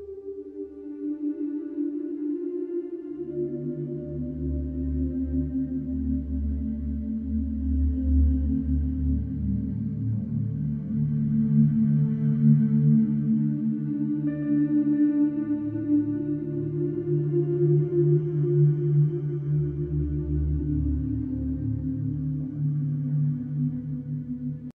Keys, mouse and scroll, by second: 13.2-18.6 drag, 21.4 Escape.